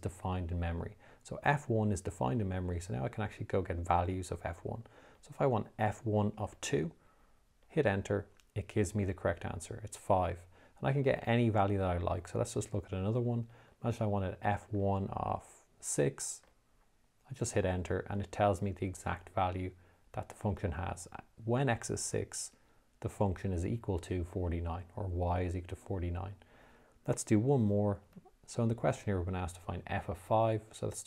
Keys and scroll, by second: 3.0 (, 6.8 2, 8.1 Return, 12.4 f, 14.0 1, 15.1 (, 16.7 6, 17.9 Return.